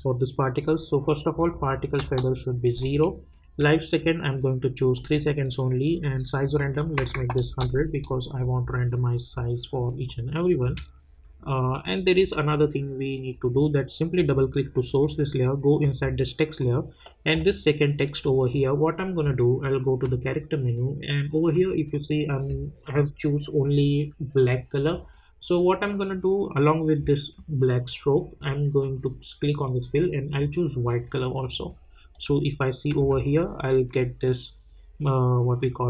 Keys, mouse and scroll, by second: 1.3 click, 1.9 Return, 2.8 click, 6.4 click, 7.4 Return, 10.0 click, 10.6 space, 13.1 click, 20.0 click, 28.8 click, 33.0 space.